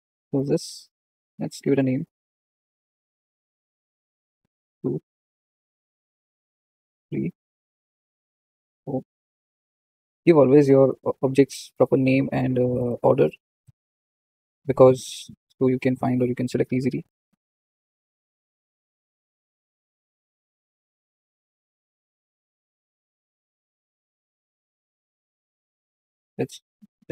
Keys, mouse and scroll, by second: 3.1-5.3 drag, 5.8-7.3 drag, 7.6-12.3 drag, 12.8-14.6 drag, 15.1-17.8 drag, 18.1-20.7 drag, 21.3-24.9 drag, 24.9 BackSpace.